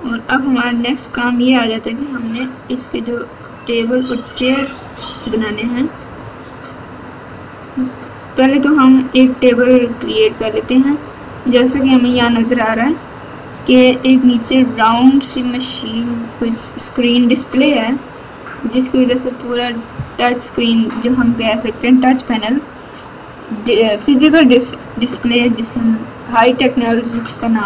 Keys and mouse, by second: 0.1 middle click, 2.9 middle click, 3.8-5.2 middle drag, 6.7 click, 9.8-11.3 middle drag.